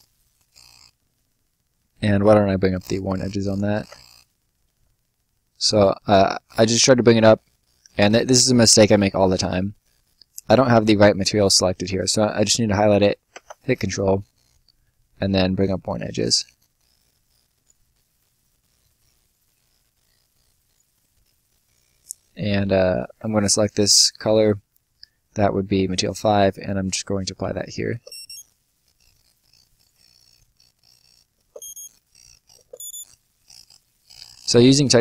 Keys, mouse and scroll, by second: 2.6 click, 3.7 ctrl+z, 7.2 click, 15.5 click, 17.8-18.4 scroll down 1, 18.4 right click, 20.8 scroll up 1, 21.0 middle click, 26.2 click, 27.4 5, 27.8 space, 28.7 right click, 30.2 click, 30.7 1, 31.2 space, 32.2 2, 32.5 space, 33.3 right click.